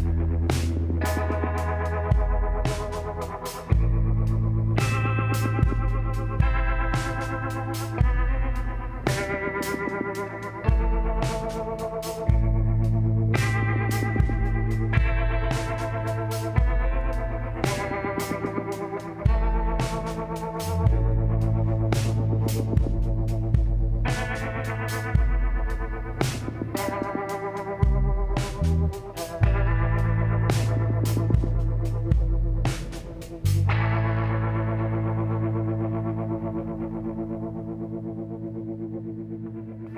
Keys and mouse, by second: 1.8-3.6 middle drag, 5.8 s, 7.6 f, 9.2 e, 10.9 e, 13.7 e, 15.5 e, 17.7 e, 22.9 e, 26.8 e, 30.8 middle click, 31.4-32.8 middle drag, 33.8 KP_7, 35.1 z, 38.2-39.6 drag, 38.2 b, 39.9 b.